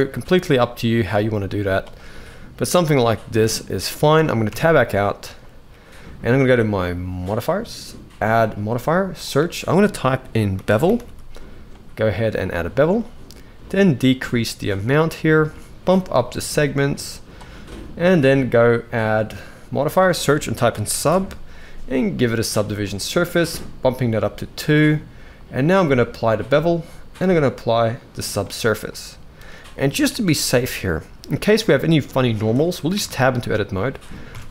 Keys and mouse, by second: 2.0-3.6 middle drag, 4.2 Tab, 4.4 middle click, 8.2-12.3 drag, 13.5-15.3 shift+drag, 16.5 click, 18.4-22.3 drag, 24.1 click, 25.5-26.0 drag, 27.1-28.2 drag, 28.6-29.8 middle drag, 30.0 shift+middle click, 32.1-32.4 shift+middle drag, 32.7 Tab, 33.0-33.8 middle drag, 34.0 a.